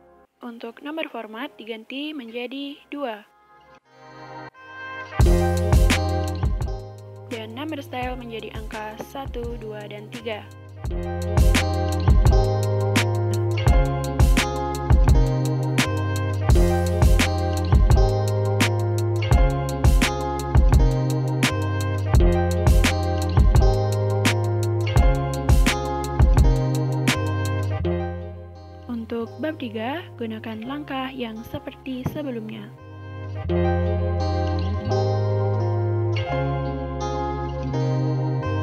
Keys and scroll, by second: 5.0-6.2 typing, 29.2-32.0 typing.